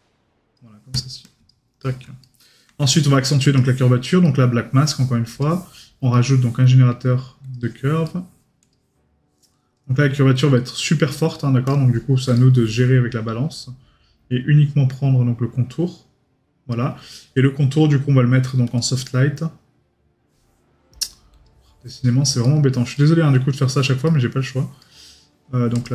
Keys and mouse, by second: 1.8 right click, 4.2 right click, 6.1 right click, 8.0 right click, 12.3 right click, 22.4 right click.